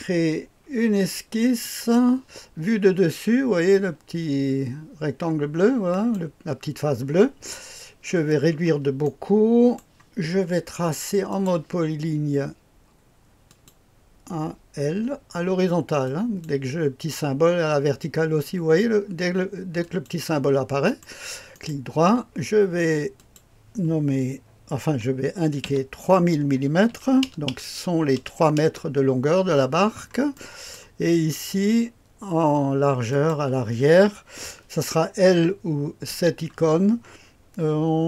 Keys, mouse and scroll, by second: 1.6 click, 5.9 click, 8.1-9.0 scroll down 1, 9.0 click, 11.3 click, 13.4 click, 16.0 click, 19.8 click, 20.8 right click, 21.5-22.5 drag, 23.1 click, 25.6 i, 26.9 KP_3, 27.2 KP_0, 27.4 KP_0, 28.1 KP_0, 28.6 Return, 29.7-30.3 scroll down 1, 30.3 click, 30.7 right click, 31.1-33.1 scroll up 1, 33.1 click, 36.1 i.